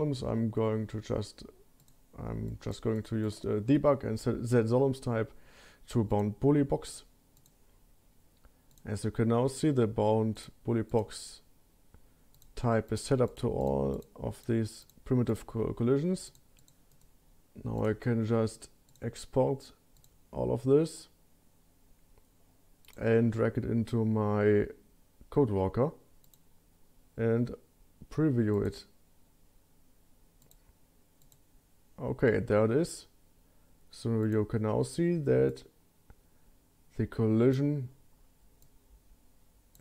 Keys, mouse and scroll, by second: 1.8 click, 2.5 click, 2.9 click, 3.2 click, 6.1 click, 7.4 click, 8.7 click, 10.3 click, 10.9 click, 12.3 click, 12.9 click, 13.3 click, 13.6 click, 13.9 click, 14.8 click, 15.3 click, 16.2 click, 16.6 click, 16.9-17.9 right drag, 18.5 click, 18.9 click.